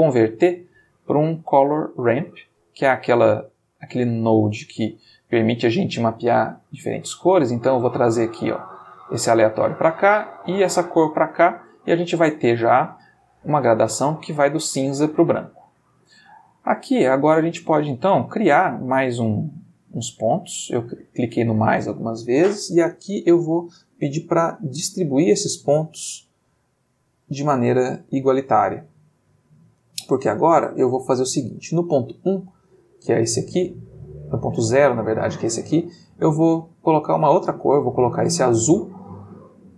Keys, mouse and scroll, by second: 1.8 click, 2.6 click, 3.5-5.5 middle drag, 7.8-9.7 drag, 10.4-11.5 drag, 17.8 click, 18.3 click, 18.8 click, 19.4 click, 23.1 click, 25.9 click, 34.4 click, 35.6 click, 37.2-37.9 drag, 38.1-39.7 drag.